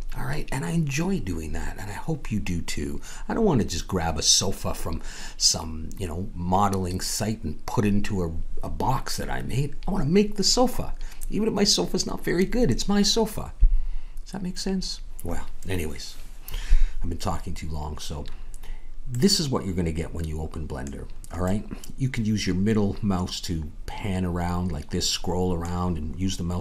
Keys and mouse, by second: 19.1-26.6 middle drag.